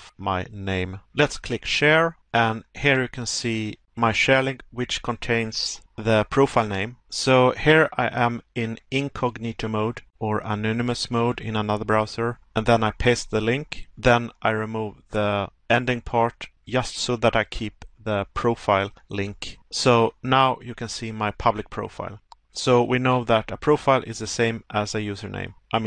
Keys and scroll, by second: 11.5 Pause, 22.8 Pause.